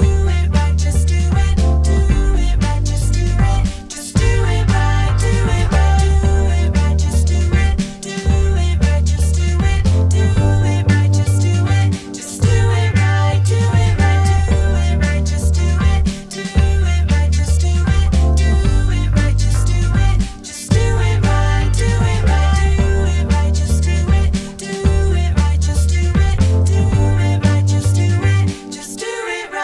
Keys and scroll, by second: 1.7 Escape, 5.1 Escape.